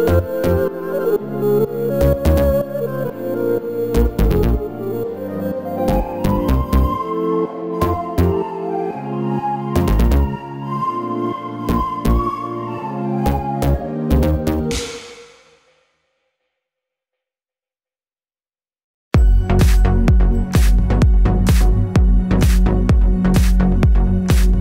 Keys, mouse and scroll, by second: 9.0 ctrl+a, 10.9 Tab, 14.7 scroll down 1, 15.3-18.9 shift+middle drag, 18.9-20.2 scroll up 2, 20.2-22.5 scroll up 1, 22.5 shift+d.